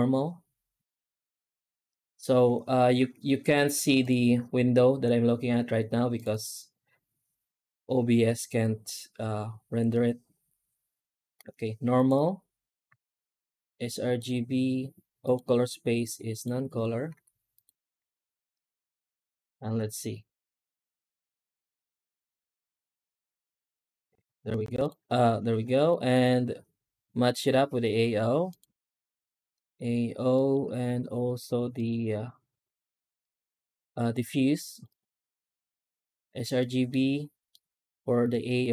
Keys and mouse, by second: 12.7 z, 15.1-16.3 drag, 17.0 z, 17.9 z, 18.9 z, 24.1 z, 25.9 middle click, 27.2 click, 30.2 middle click, 31.6 click, 36.5 middle click, 37.4-38.7 middle drag.